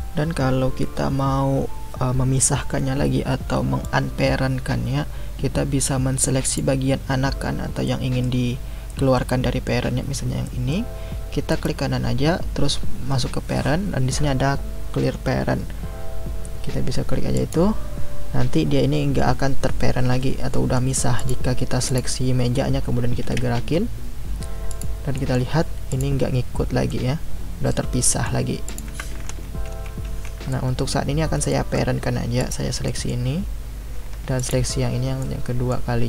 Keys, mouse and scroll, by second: 6.4 click, 7.8-11.5 middle drag, 11.5-14.6 right drag, 20.5 middle click, 21.2 click, 21.9 click, 23.2 g, 25.1-25.9 middle drag, 25.9 click, 26.9-28.7 middle drag, 28.7 click, 29.2 ctrl+z, 29.7 ctrl+z, 30.1 ctrl+z, 30.5-32.4 middle drag, 32.4 click, 32.8-34.4 middle drag, 34.4 shift+click, 35.2-36.0 middle drag.